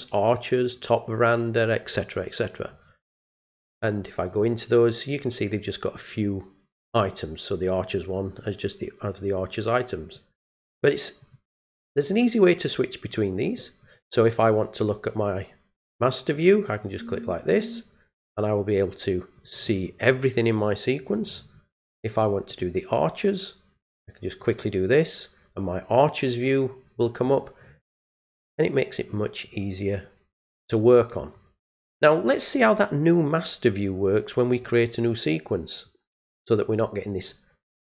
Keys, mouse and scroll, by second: 4.3 click, 11.2 click, 13.4 click, 16.3 click, 20.0-22.5 scroll down 1, 22.5 click, 24.4 click.